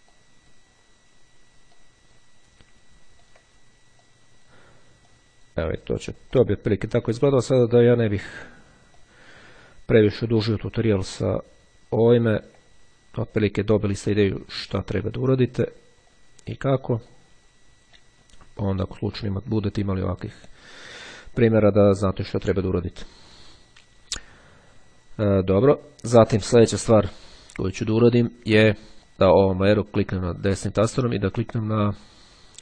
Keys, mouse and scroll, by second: 0.2 click, 1.8 click, 3.3 ctrl+click, 4.1 click, 5.2 click, 6.5 ctrl+click, 7.4-8.6 drag, 9.2 click, 10.5 ctrl+click, 11.2-12.3 drag, 12.5 ctrl+click, 14.3 ctrl+click, 15.2-16.3 drag, 17.2 click, 19.3 click, 20.4 click, 21.7 click, 23.0 click, 24.8-25.8 ctrl+scroll down 2, 28.6-29.0 ctrl+scroll up 2, 29.1-30.2 drag.